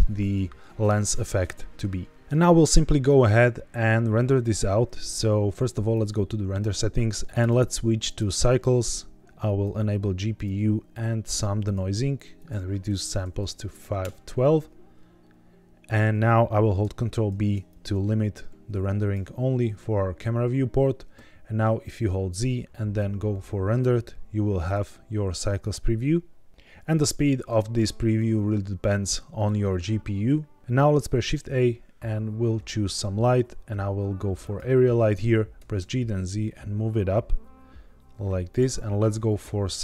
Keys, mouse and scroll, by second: 5.8 click, 7.3 click, 8.8-9.6 drag, 10.3 click, 11.6 click, 12.3-13.9 drag, 17.2 ctrl+b, 19.9-20.3 scroll up 2, 21.9 z, 24.9-25.5 scroll down 2, 25.5-27.1 scroll up 1, 30.6 shift+a, 31.1 shift+a, 35.5 g, 35.7 z, 38.4 click, 38.7 scroll down 1, 39.6 shift+middle click.